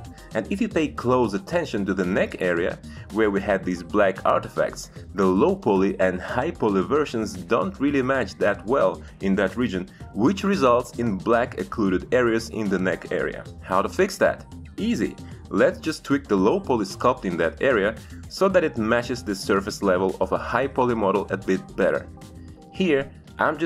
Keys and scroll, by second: 22.8 space.